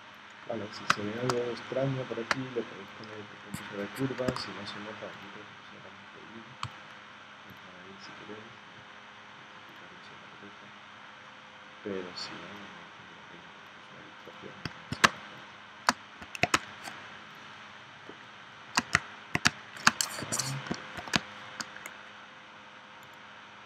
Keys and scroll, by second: 0.9 space, 2.3 space, 4.3 a, 15.0 space, 16.5 space, 19.5 space, 20.2 p, 21.1 space.